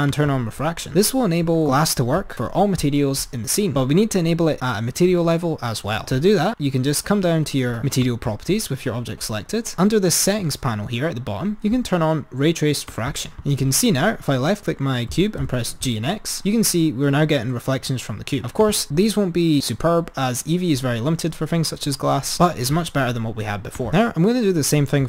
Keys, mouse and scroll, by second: 0.4 click, 8.5 click, 13.4 click, 15.3 g, 23.9-24.8 drag.